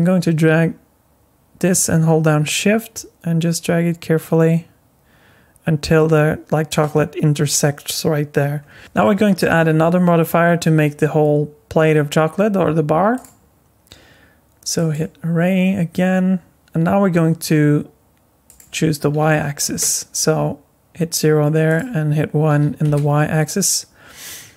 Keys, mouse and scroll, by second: 8.3-9.5 scroll down 7, 8.8 middle click, 8.8-9.5 scroll up 7, 13.1 click, 18.5 click, 21.7 click.